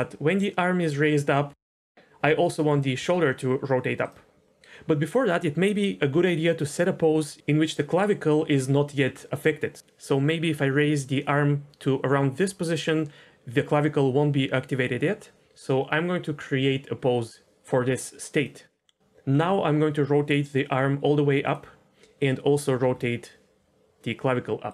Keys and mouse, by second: 1.9 r, 2.9 r, 6.1 r, 19.0 r, 19.3 r, 22.8 r.